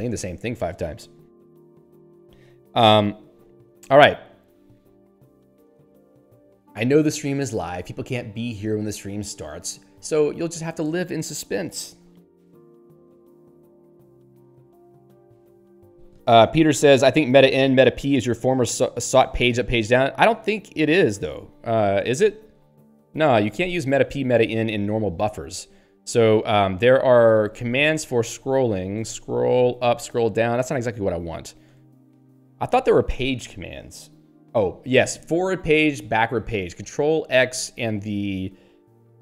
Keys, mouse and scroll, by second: 4.7-5.0 scroll down 3, 5.5 scroll up 1, 6.2 click, 23.9 ctrl+g, 28.4 alt+x, 28.5-30.0 typing, 30.4 Down, 31.8 ctrl+g, 32.4 alt+x, 32.4-33.4 typing, 35.1 ctrl+Down, 36.2 ctrl+n.